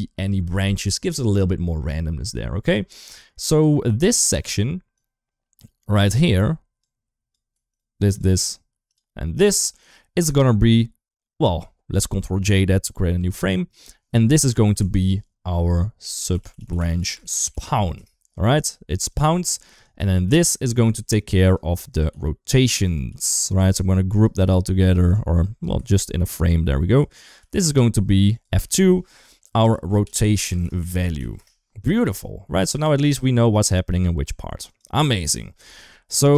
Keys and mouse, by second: 2.6 click, 3.4 click, 4.0 click, 4.8 click, 5.8 click, 6.0 click, 6.7-7.2 drag, 7.5 shift+click, 8.7 shift+click, 9.2 shift+click, 12.4 ctrl+j, 13.5 click, 13.9 click, 14.2 click, 14.6 F2, 18.7 g, 19.6 click, 19.8 g, 20.6 click, 21.1 g, 21.7 click, 21.9 g, 22.7 click, 22.9 g, 24.0 click, 24.2 g, 25.1 click, 25.7 ctrl+j, 26.1 click, 26.8 click, 27.2 g, 28.4 F2, 31.9 click, 32.6 click, 32.9 click, 33.4 click, 33.7 g, 35.1 click, 36.0 ctrl+s.